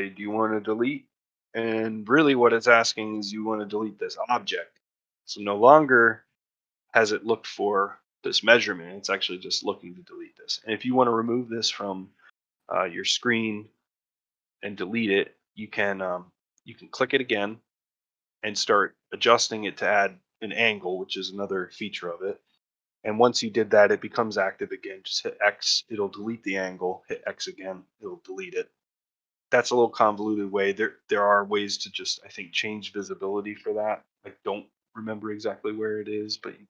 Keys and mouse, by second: 23.2 click, 25.2 x, 28.4 middle drag, 28.8 middle click.